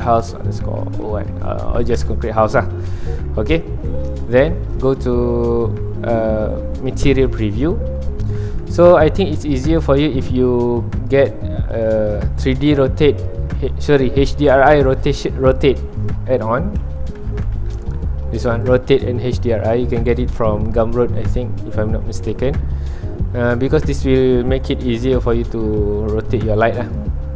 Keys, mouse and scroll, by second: 1.9 BackSpace, 2.0 Return, 3.8-7.0 middle drag, 7.0 click, 7.7 middle click, 8.5 ctrl+s, 8.7-13.5 middle drag, 13.5-17.3 drag, 24.3-24.8 scroll up 1, 24.8 middle click, 25.8 ctrl+alt+click, 26.5 middle click, 26.9 ctrl+alt+click.